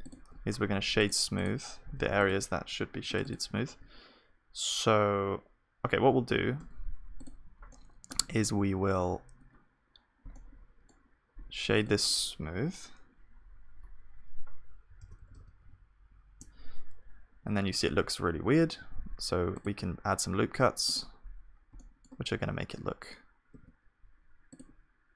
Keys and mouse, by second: 1.3-6.2 drag, 6.2 a, 6.6 Tab, 7.7-10.3 drag, 10.3-13.7 middle drag, 13.7 F3, 18.1 middle click, 18.3 Tab, 18.9 ctrl+r, 21.0 Tab, 21.7 middle click, 22.3 Tab, 23.5 ctrl+r.